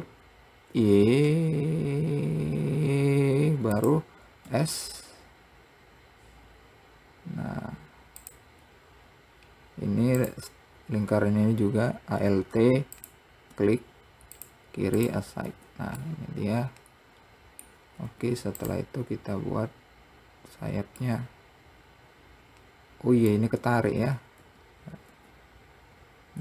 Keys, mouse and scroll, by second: 10.5 click, 13.2 alt+click, 14.7 click, 15.2 click, 15.8 Tab, 16.3-18.3 middle drag, 19.5-20.6 scroll down 1, 20.9-21.3 scroll up 1, 21.3-24.3 middle drag, 24.8 ctrl+z, 25.4 ctrl+z.